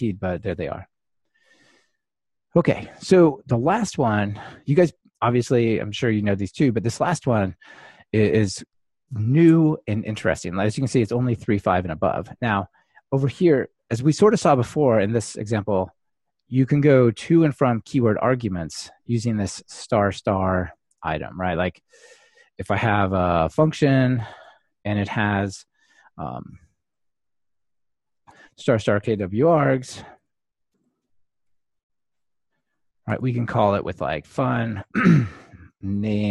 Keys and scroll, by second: 28.4 Return, 33.9 Return.